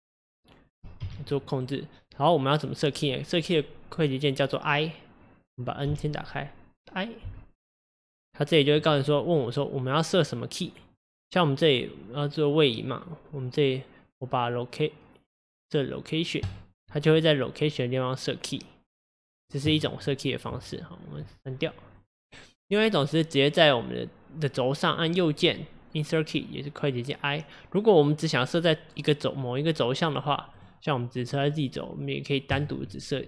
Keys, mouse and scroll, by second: 1.0 g, 5.9 n, 19.8-22.0 drag, 22.0 x, 32.6-33.2 right drag.